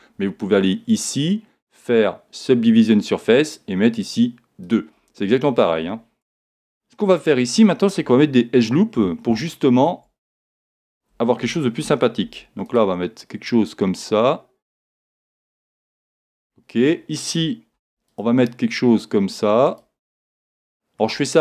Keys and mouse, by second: 0.9 click, 4.6 click, 6.3 Tab, 7.0-9.0 middle drag, 9.1 middle click, 9.5-11.4 middle drag, 11.4 a, 12.2 ctrl+r, 15.3 click, 16.3-17.7 middle drag, 17.7 ctrl+r, 20.1 click, 21.3 middle click.